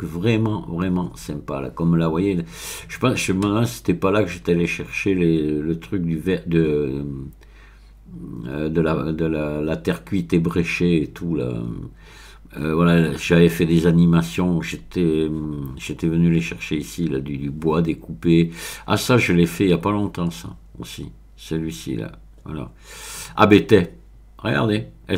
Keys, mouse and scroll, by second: 0.5-1.5 scroll up 2, 12.0-12.9 scroll down 3, 16.8-17.8 scroll up 1, 19.7-20.8 scroll up 1, 23.3-24.4 scroll up 1.